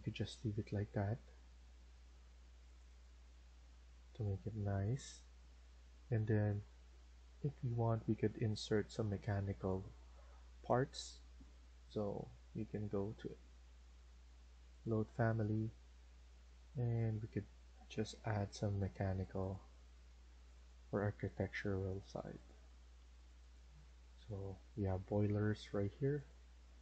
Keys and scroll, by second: 12.3 Escape.